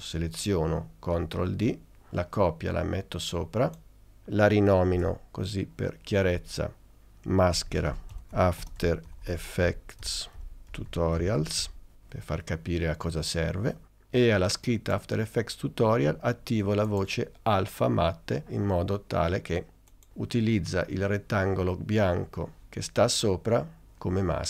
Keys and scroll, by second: 1.3 super+d, 5.1 Return, 6.9-11.8 typing.